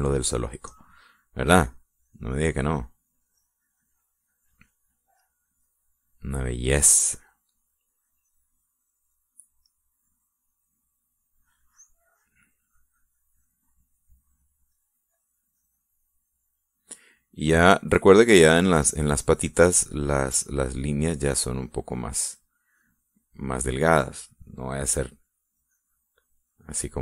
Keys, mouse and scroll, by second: 1.9 middle click, 3.0 click, 3.4 click, 3.8-5.8 drag, 6.3 click, 6.6 click, 10.8 middle click, 12.8 click, 13.2-14.8 drag, 15.0 click, 15.8 click, 16.6-17.7 drag, 20.5-22.7 drag, 23.5 click, 25.0 click, 26.8-27.0 drag.